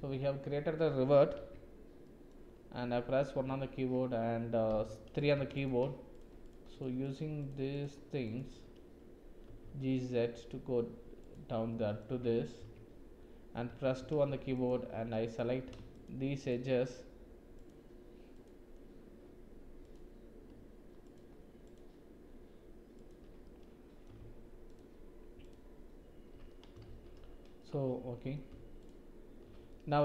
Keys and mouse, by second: 1.3 Tab, 2.0 click, 3.3 1, 4.7 3, 5.2 click, 6.4 shift+click, 6.7 shift+click, 7.0 shift+click, 7.4 shift+click, 7.7 shift+click, 8.3 shift+click, 9.4 g, 11.7 drag, 12.1 Tab, 12.6 Tab, 13.7 2, 14.5 alt+shift+click, 15.3 click, 15.9 alt+shift+click, 16.3 alt+shift+click, 17.5 alt+shift+click, 18.3 alt+shift+click, 19.8 alt+shift+click, 21.1 alt+shift+click, 23.0 alt+shift+click, 23.4 middle click, 25.4 alt+shift+click, 26.4 click, 26.8 shift+z, 27.6 click, 29.7 click.